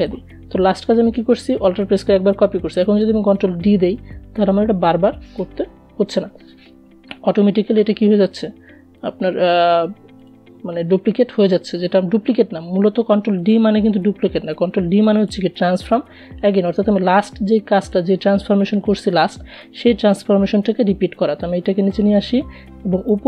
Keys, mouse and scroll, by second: 1.6 ctrl+d, 7.3 shift+click, 16.1 shift+click, 18.3 Down, 21.2 click, 22.7-23.2 scroll up 2.